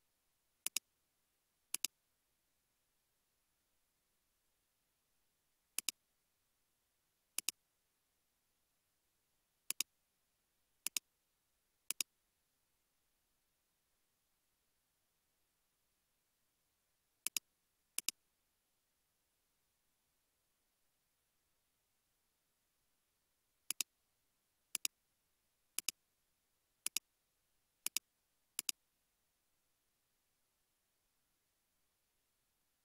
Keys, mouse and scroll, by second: 0.5-2.7 typing, 5.2-6.2 typing, 7.7 typing, 15.9-16.6 typing, 22.7-24.1 typing, 25.3-26.0 typing.